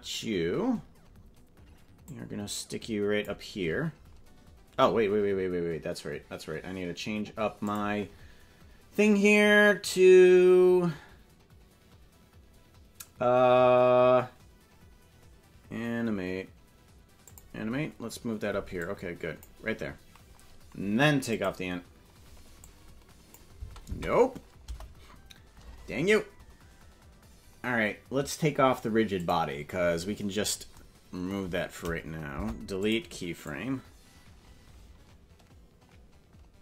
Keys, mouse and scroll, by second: 2.1-3.2 drag, 7.6 click, 17.2 click, 18.7 click, 21.3 click, 22.7 click, 23.5 space, 23.8 space, 24.6 KP_0, 29.1 click, 30.3-30.7 scroll down 5, 32.3 Delete, 33.4-36.6 drag.